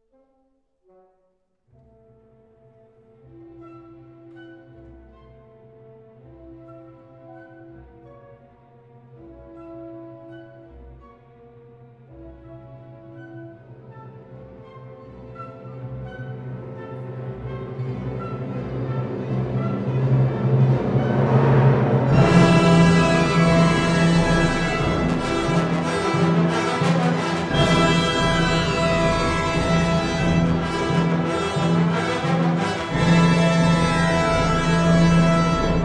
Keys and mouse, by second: 0.5 ctrl+r, 4.3 click, 4.7 ctrl+r, 12.8 ctrl+r, 15.3 click, 15.6 ctrl+r, 18.2 Tab, 19.5 Tab, 20.8 ctrl+r, 23.4 click, 24.9 ctrl+r, 28.5 click, 29.4 Tab, 30.5 click.